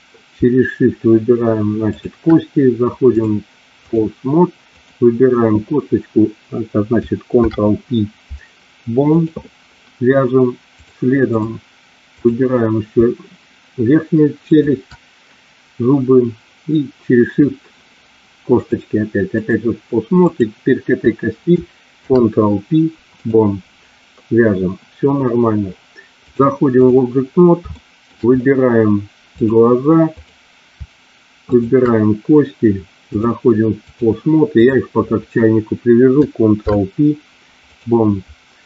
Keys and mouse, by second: 3.0-4.0 drag, 4.6 click, 7.2 ctrl+p, 10.7 click, 12.1 click, 18.5-19.5 drag, 20.3 click, 21.9 ctrl+p, 26.4 click, 27.8 shift+middle click, 30.0 click, 33.0-34.0 drag, 34.5 click, 36.5 ctrl+p.